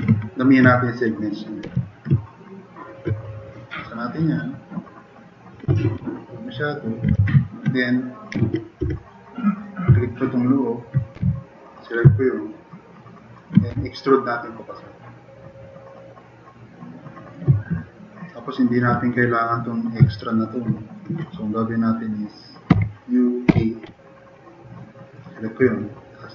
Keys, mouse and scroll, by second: 1.7 2, 2.8 click, 5.8-6.3 drag, 7.1 e, 7.8 click, 8.4 ctrl+z, 8.8 e, 9.3 click, 9.6 click, 10.1 drag, 11.2 f, 12.3 click, 13.7 d, 14.1-17.3 drag, 17.8 click, 18.0 click, 22.7 u, 23.5 b.